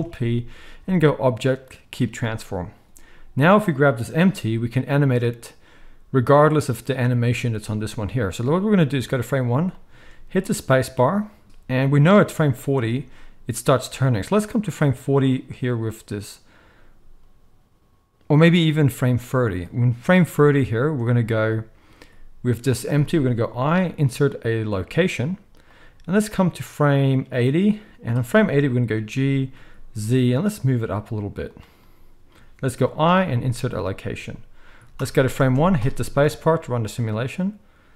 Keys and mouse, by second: 3.4 click, 3.5-13.9 middle drag, 4.2 g, 10.3 space, 12.5 space, 13.9-31.6 drag, 23.4 i, 28.9 g, 31.6-37.9 middle drag, 32.7 i, 35.0 shift+Left, 35.4 space.